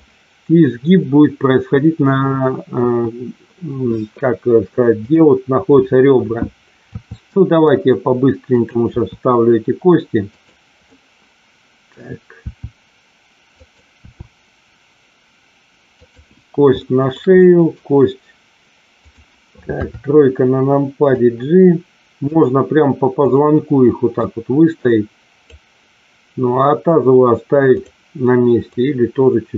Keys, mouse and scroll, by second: 2.7 KP_1, 4.9 click, 6.9 e, 8.4 click, 8.9 e, 10.3 click, 10.8-11.9 middle drag, 12.4 e, 13.5 click, 13.9 e, 15.9 click, 16.8 shift+middle click, 17.3 middle click, 19.7 KP_3, 21.0-22.2 drag, 23.2 click, 24.2-25.4 drag, 27.7 click, 28.7-29.5 drag.